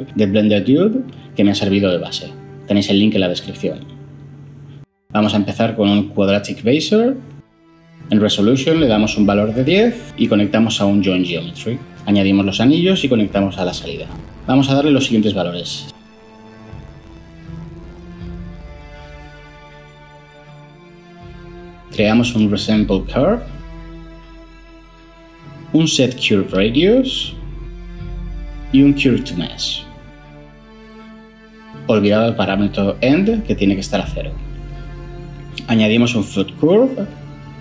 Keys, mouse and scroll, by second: 5.3 ctrl+shift+a, 5.5-5.8 typing, 6.1 Down, 6.5 Return, 8.9 typing, 9.3 Return, 16.4-20.5 typing, 16.9 Tab, 18.7 Tab, 19.3 Tab, 20.8 Tab, 21.1 Return, 21.7 ctrl+shift+a, 22.2-22.5 typing, 23.1 Return, 25.4 ctrl+shift+a, 25.6-26.0 typing, 26.3 Down, 26.5 Down, 26.6 Down, 26.8 Down, 27.0 Down, 27.4 Down, 27.4 Return, 28.7 ctrl+shift+a, 29.2-30.9 typing, 33.4 0, 33.7 Return, 35.4 ctrl+shift+a, 35.4-35.7 typing, 36.1 Return.